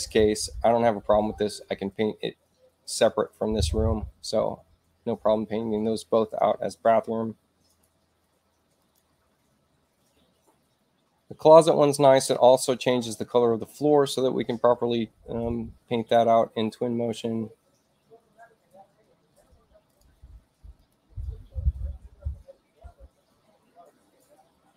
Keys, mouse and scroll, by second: 7.7 click, 8.8 click, 19.8 click, 20.7 click.